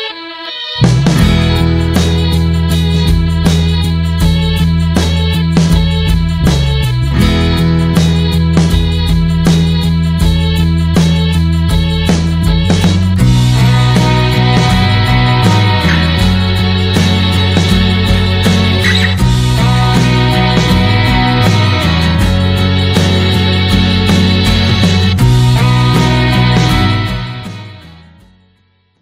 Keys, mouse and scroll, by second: 4.5 click, 4.9 s, 9.7 scroll down 2, 10.4 s, 11.8 click, 14.9 shift+middle click, 15.4-15.8 scroll up 1, 15.8 shift+middle click, 15.9 scroll up 1, 16.1 space, 17.0-20.9 middle drag, 20.9 space, 21.2 middle click, 21.5-21.8 scroll down 2, 21.8-22.9 middle drag, 22.9 space, 23.2-23.6 scroll up 1, 23.6-26.2 shift+middle drag, 26.2-26.6 scroll up 1, 26.6-27.8 shift+middle drag, 27.8 space.